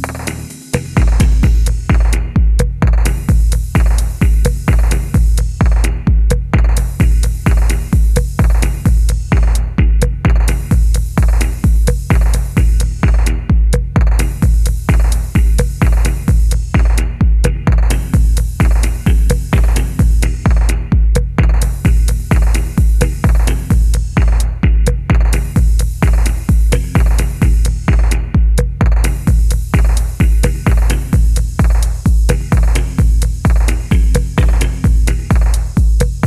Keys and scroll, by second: 1.1-1.7 typing, 3.4-5.2 typing, 4.4 Escape, 6.5-7.7 typing, 10.8 typing, 15.4-17.0 typing, 18.3 Escape, 18.5 ., 20.3-20.9 typing, 22.8 0, 22.8 Return, 23.3 1, 25.2-27.0 typing, 26.6 Return, 28.7 g, 30.4 g, 34.7 r.